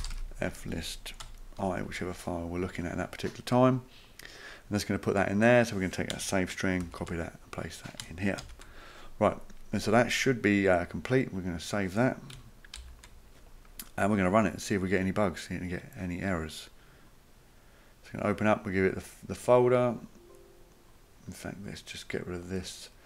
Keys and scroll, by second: 0.0-2.4 typing, 6.8 ctrl+c, 8.4 ctrl+v, 12.8 ctrl+s.